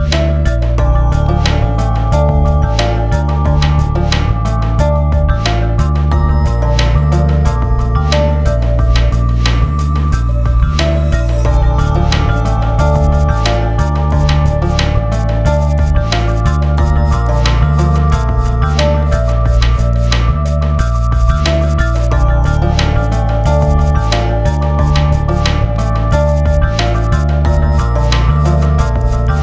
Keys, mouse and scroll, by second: 12.9 click, 18.8 click, 19.4 click, 19.8 F4, 20.4 click, 21.5 click, 23.4 k, 25.2 typing, 25.5-26.2 scroll down 1.